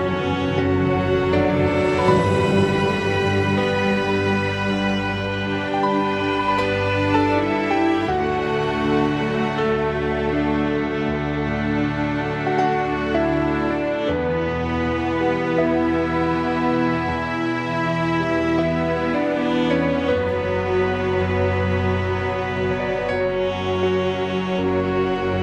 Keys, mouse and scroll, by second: 8.2 Tab, 9.0 click, 10.8-13.2 drag, 14.4 Tab, 16.0 middle click, 16.3 middle click, 17.6 click, 18.5 r.